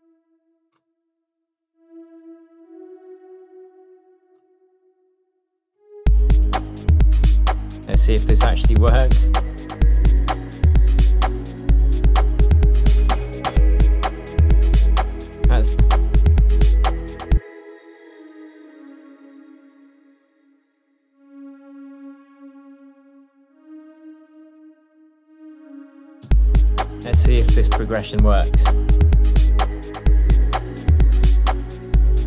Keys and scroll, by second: 6.1 space, 9.7 shift+Tab, 17.4 space, 18.6 Down, 23.5 Up, 26.3 alt+space, 27.2 space, 28.8 p.